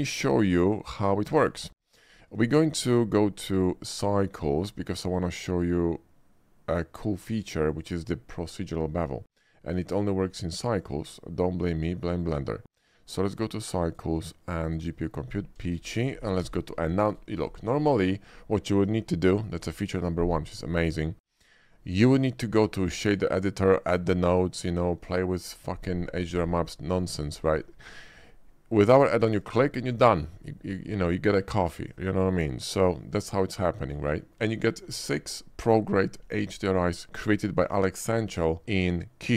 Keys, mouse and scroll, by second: 0.0-1.4 shift+middle drag, 4.7 click, 7.8 click, 10.9 click, 12.3 click, 13.1 click, 13.9 click, 14.7 click, 15.7 shift+middle click, 16.0 shift+middle click, 16.5 b, 16.7 n, 17.6 shift+middle drag, 18.5 shift+middle drag, 29.2 click, 31.9 shift+middle click, 32.7 shift+click, 33.4 shift+middle click, 34.2 shift+middle click, 34.7 shift+middle click.